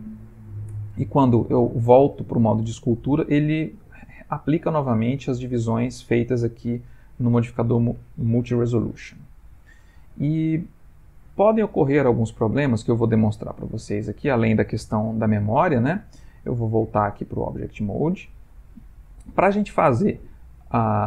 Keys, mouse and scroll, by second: 16.6 click.